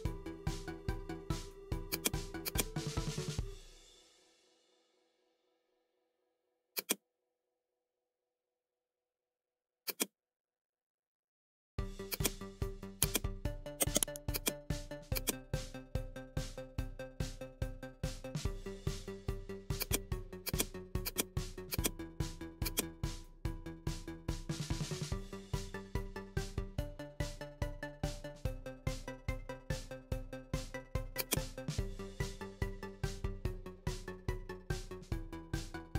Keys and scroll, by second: 17.1 typing, 18.2-18.7 typing.